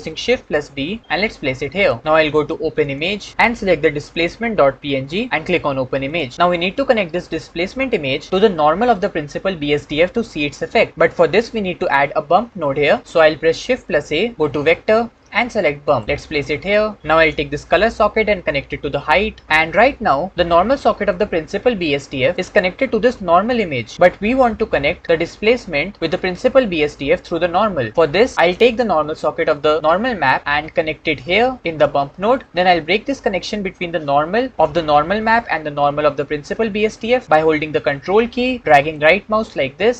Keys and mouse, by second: 0.2 shift+d, 2.7 click, 8.5-12.2 drag, 13.8 shift+a, 18.0 click, 18.2-19.4 drag, 20.4 click, 24.1 click, 26.7 click, 30.4-31.7 drag, 38.9 ctrl+click.